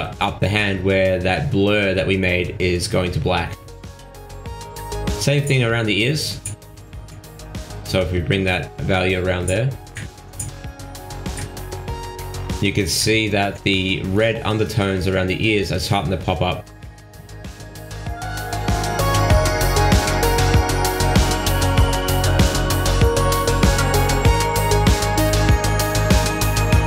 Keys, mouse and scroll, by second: 0.6 middle click, 1.4 g, 2.6 middle click, 3.8 middle click, 4.0 shift+middle click, 4.7 g, 5.8 middle click, 6.7-7.1 scroll up 8, 7.1 middle click, 8.0 shift+middle click, 8.6 shift+scroll down 1, 8.8 middle click, 9.8 shift+middle click, 10.6 g, 15.6-16.0 scroll up 3, 16.1 middle click, 16.6-17.5 scroll down 13, 17.6 middle click, 19.0 click, 21.2-21.8 scroll up 9, 21.8 middle click, 22.5 shift+middle click, 23.1-23.7 scroll up 4, 23.7 middle click, 24.6 shift+middle click.